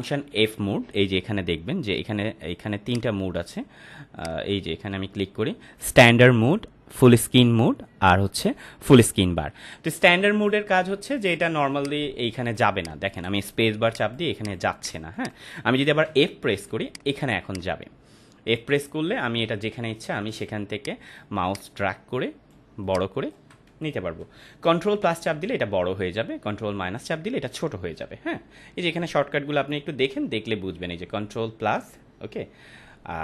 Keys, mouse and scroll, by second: 2.8-10.7 drag, 11.6 space, 11.7-12.6 click, 12.1 space, 12.8 click, 12.9 space, 13.8 click, 14.1 space, 14.3 click, 14.4 space, 14.7 click, 14.7 click, 14.9 space, 16.0-23.4 typing, 16.8 click, 17.4 click, 20.7 click, 21.4 click, 22.8 click, 25.1 ctrl+=, 26.4 ctrl+-, 28.8 ctrl+click, 29.8 ctrl+-, 30.2 ctrl+=, 30.7-32.4 ctrl+drag.